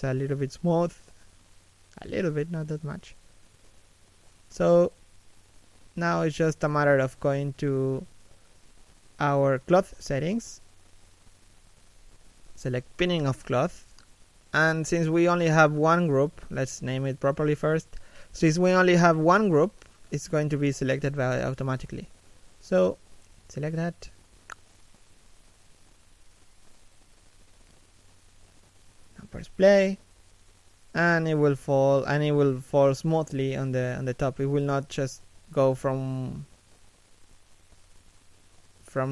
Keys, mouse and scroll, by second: 1.9 shift+k, 2.2 f, 2.9 middle click, 4.6 middle click, 25.2 middle click, 28.9 middle click, 32.9 middle click, 33.9 middle click, 38.9 middle click.